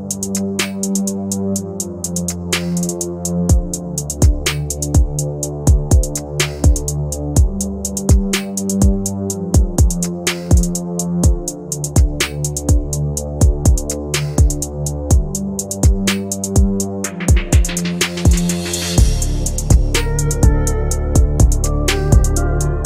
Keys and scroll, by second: 2.9 F3, 4.5 ctrl+g, 21.2 Left.